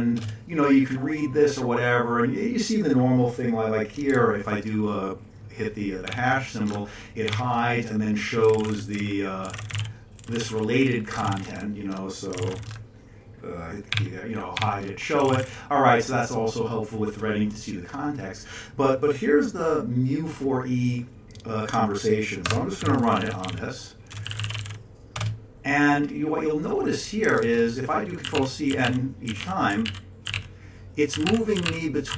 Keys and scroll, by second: 0.1 Return, 6.1 #, 7.3 #, 8.5 ctrl+x, 8.6 o, 9.4 ctrl+x, 9.5 o, 10.2 ctrl+v, 11.2 ctrl+n, 12.4 ctrl+n, 14.5 ctrl+x, 15.3 o, 22.4 Escape, 22.8-25.2 typing, 25.2 Return, 27.0-29.4 typing, 29.4 ctrl+n, 29.7 ctrl+c, 29.8 ctrl+p, 30.3 ctrl+c, 30.3 ctrl+p, 31.1 ctrl+c, 31.3 ctrl+p, 31.5 ctrl+c, 31.6 ctrl+n, 32.1 ctrl+c.